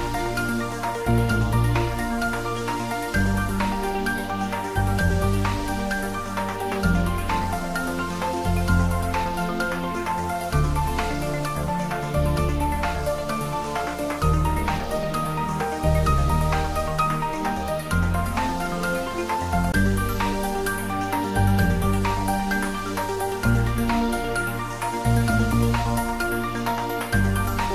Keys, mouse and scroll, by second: 0.5 space, 10.6 click, 11.5 Tab, 13.6 click, 16.6 g, 20.5 click, 21.0 ctrl+z.